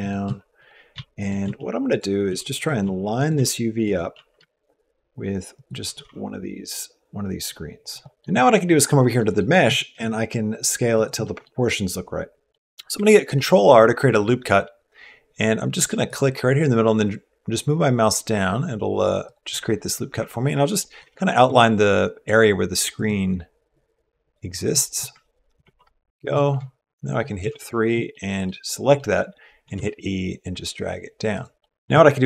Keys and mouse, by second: 0.0-3.9 typing, 5.6 s, 8.2 middle click, 9.0 middle click, 9.4 s, 11.0 middle click, 11.4-12.6 middle drag, 13.1 ctrl+r, 20.8 ctrl+r, 25.4 ctrl+r, 27.3 3, 27.4 click, 27.9 middle click, 28.8 middle click, 29.5 e, 31.4 middle click.